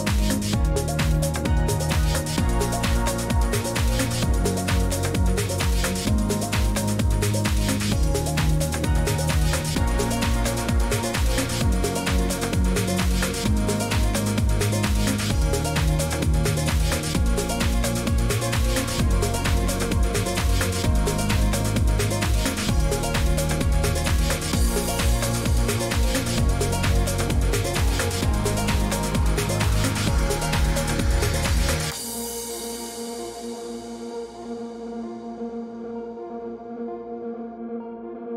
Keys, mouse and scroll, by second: 1.4 middle click, 1.4-3.1 typing, 1.5 shift+click, 2.5 click, 3.1 click, 5.3 click, 5.8-7.3 typing, 6.7 right click, 7.3 click, 8.0 click, 8.6 click, 9.7-13.2 typing, 10.3 middle click, 13.0 click, 14.0 right click, 15.5 click, 16.2 click, 19.4-21.5 typing, 20.5 click, 21.4 right click, 21.5 right click, 23.6 shift+click, 24.4 click, 26.1 right click, 26.1 shift+d, 26.5 shift+click, 27.4 click, 28.1 click, 28.8 click, 29.3 click, 29.4 shift+click, 36.7 click, 37.9 click.